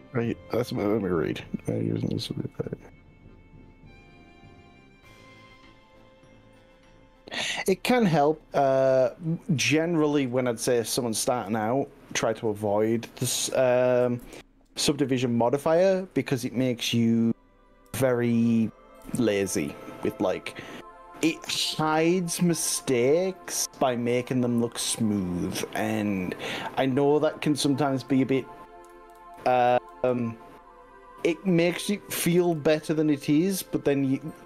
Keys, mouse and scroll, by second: 0.3-10.5 middle drag, 13.9 s, 14.2 y, 17.1 click, 17.9 g, 19.1 y, 21.9 scroll up 2, 22.3-24.3 scroll down 13, 24.8-25.5 scroll up 3, 27.1 scroll up 2, 28.1 drag, 28.9 ctrl+z, 29.3 ctrl+z, 29.7 ctrl+z, 32.5 s, 34.4 y.